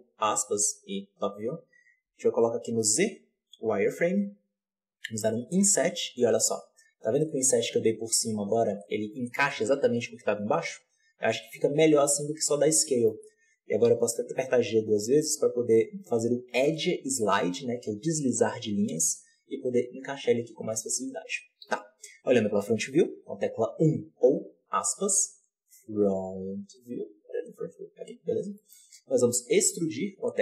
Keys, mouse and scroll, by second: 3.6 z, 5.2 i, 11.3-12.7 scroll up 3, 12.7-13.8 shift+middle drag, 13.8 g, 21.6 KP_1, 28.3-28.6 scroll down 1, 28.6 scroll up 1, 29.3 e.